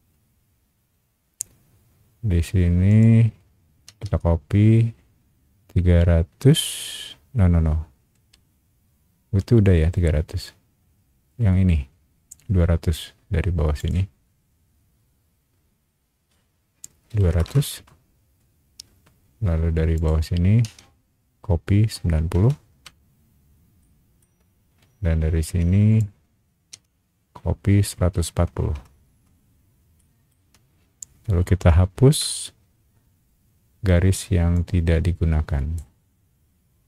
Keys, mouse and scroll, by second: 2.9 shift+click, 8.1 Escape, 13.8 click, 14.7 middle click, 14.7-15.6 scroll up 3, 15.0 middle click, 15.4 middle click, 17.1 KP_2, 17.3 KP_0, 17.7 KP_Enter, 18.7 middle click, 18.7 scroll up 1, 19.9 click, 22.0 KP_9, 22.3 KP_0, 22.8 KP_Enter, 23.8 shift+middle click, 24.4 scroll down 1, 25.9 shift+click, 27.8 KP_1, 28.7 KP_4, 29.1 KP_Enter, 30.0 shift+middle click, 32.1 e, 34.5-35.7 drag.